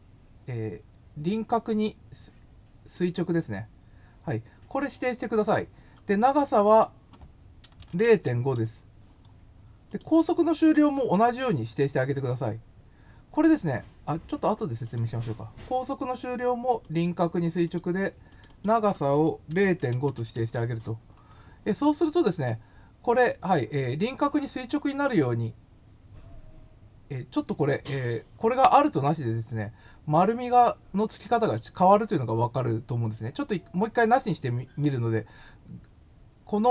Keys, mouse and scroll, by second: 2.9 click, 6.5 click, 6.6 click, 9.9 click, 10.6 click, 14.8 click, 15.8 click, 16.8 click, 17.6 click, 18.3 click, 18.5 click, 31.4 click.